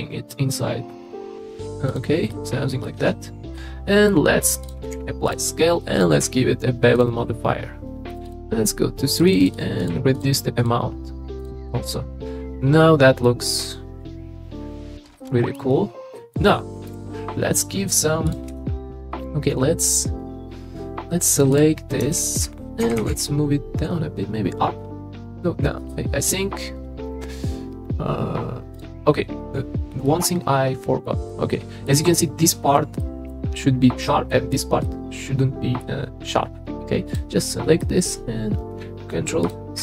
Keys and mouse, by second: 1.9 right click, 2.3 middle click, 3.0 Tab, 3.5-4.1 middle drag, 4.9 ctrl+a, 5.9 click, 7.0 ctrl+a, 8.1 click, 8.3 click, 9.3 click, 9.4 click, 9.8 click, 10.6 click, 11.4 click, 11.9-13.3 middle drag, 15.2 middle drag, 16.2 middle click, 16.8 KP_3, 18.5 Tab, 21.5 click, 22.8 g, 23.0 g, 23.1 z, 30.0 click, 30.8-31.9 middle drag, 33.0 middle click, 34.3 middle click, 35.3 middle click, 35.4 middle click, 35.6 middle click, 37.5 middle click, 39.4 ctrl+click.